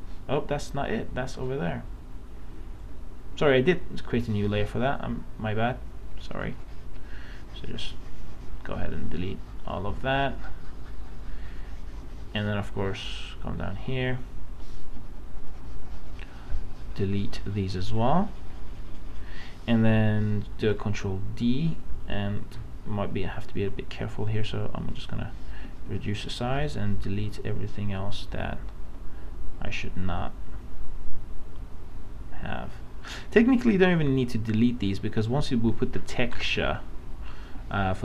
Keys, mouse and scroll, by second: 20.5 ctrl+d, 23.6 right click, 24.5-25.7 drag, 25.9 space, 36.5 space, 36.8 click, 37.5 space.